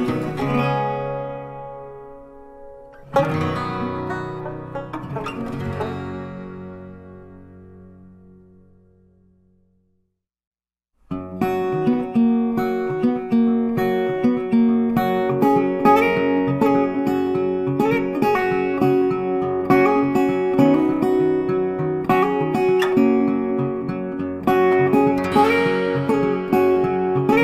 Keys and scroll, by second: 14.0 ctrl+z, 14.8 ctrl+shift+z.